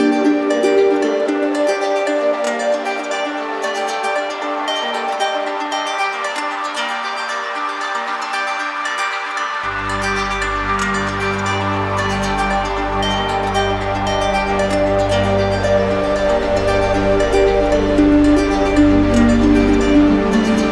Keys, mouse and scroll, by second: 0.6 alt+click, 0.8 d, 1.4 d, 3.2 z, 5.1-6.2 right drag, 6.5-7.6 right drag, 9.2-12.8 right drag, 13.4-20.6 shift+right drag, 20.6 alt+click.